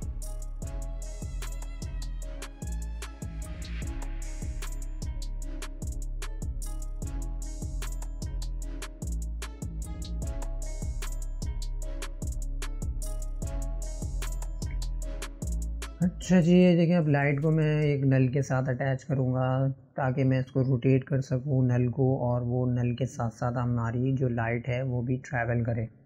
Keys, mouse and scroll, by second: 0.5-2.0 middle drag, 2.0-3.0 scroll down 1, 3.0 scroll down 2, 3.2-5.8 middle drag, 7.1 click, 7.6 scroll up 2, 12.2-14.7 middle drag, 14.7 click, 17.5 shift+a, 19.8-20.4 drag, 20.4-22.0 middle drag, 22.0 click, 22.9 click, 25.0-25.5 scroll up 1, 25.5-26.0 scroll down 4.